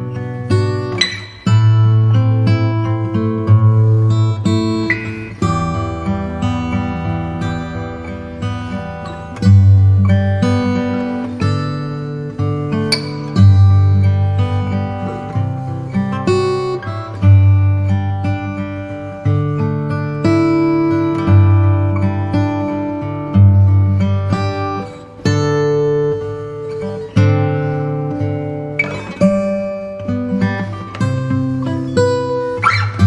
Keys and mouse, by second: 2.6 s, 6.3 click, 8.2 s, 12.4 click, 13.8 s, 14.2 KP_1, 14.5 alt+click, 16.1 KP_7, 20.6-22.7 right drag, 24.8 KP_1, 26.8 g.